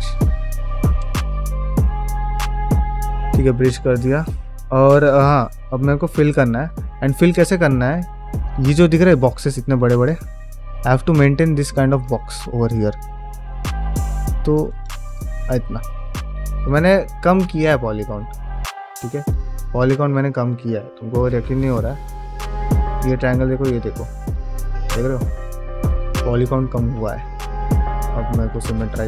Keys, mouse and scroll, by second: 0.7 KP_Multiply, 1.4 middle click, 2.0 middle click, 2.6 KP_Divide, 3.0-5.1 middle drag, 5.5 KP_Divide, 6.0 middle click, 6.4 scroll up 2, 6.7 shift+middle click, 7.0-7.6 scroll down 2, 7.6 shift+middle click, 7.9 middle click, 9.7 scroll up 1, 10.0 shift+middle click, 10.4 middle click, 11.3 ctrl+r, 14.9 click, 15.2 middle click, 15.7 scroll up 1, 15.8 scroll down 1, 16.1 middle click, 19.0 middle click, 19.4-19.8 scroll up 1, 19.8 middle click, 21.1 KP_Divide, 21.6 middle click, 22.3 alt+middle click, 23.9 shift+middle click, 26.9 q.